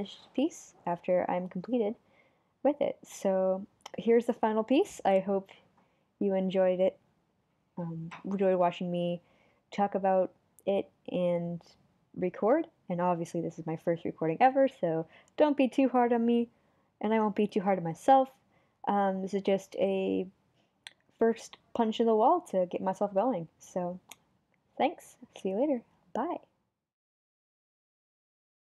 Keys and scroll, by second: 2.2 super+z, 7.5 super+z, 8.0 super+z.